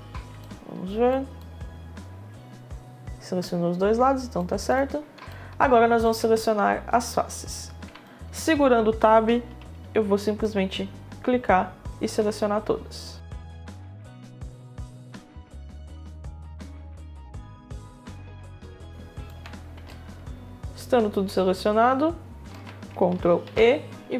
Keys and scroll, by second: 4.0 space, 15.3 Tab, 17.1 Tab, 19.0 Tab, 22.1 Tab, 23.0 e.